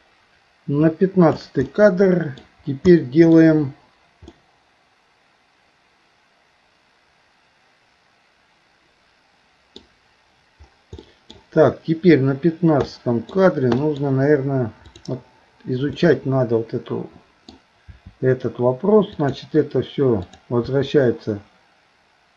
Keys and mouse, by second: 1.7 middle click, 2.9 middle click, 4.3-9.8 middle drag, 11.0 middle click, 12.9 middle click, 13.9 middle click, 14.9 click, 16.0-17.5 middle drag, 17.9 r, 20.2 click, 20.6 r.